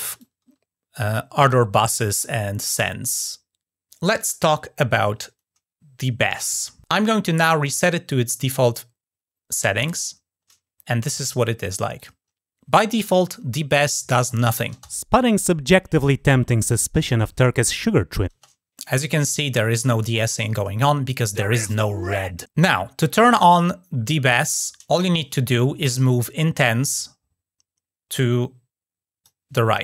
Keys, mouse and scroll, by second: 0.0 click, 1.9-3.9 drag, 9.6 click, 11.7 click, 26.7-29.1 drag, 29.7 click.